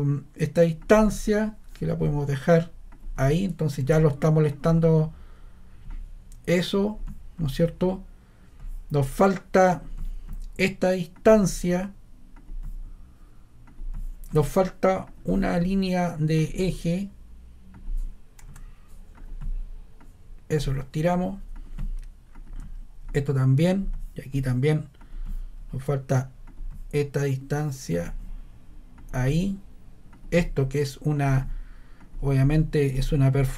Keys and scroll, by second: 18.4 ⟲, 33.3 Escape.